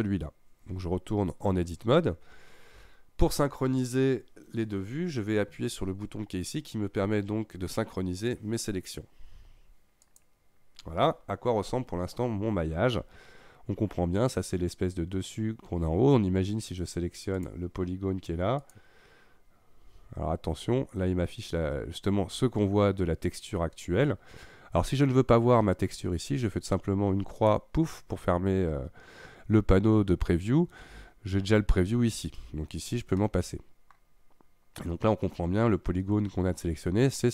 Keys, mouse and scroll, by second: 1.7 Tab, 10.0 click, 11.6-14.4 scroll up 5, 17.4 click, 18.6 click, 19.8-20.8 scroll down 7, 20.8-23.7 scroll up 1, 27.4-28.1 drag, 30.0-32.9 scroll up 4, 32.9-33.2 scroll down 1, 33.2-34.2 middle drag, 34.2-35.8 scroll up 2.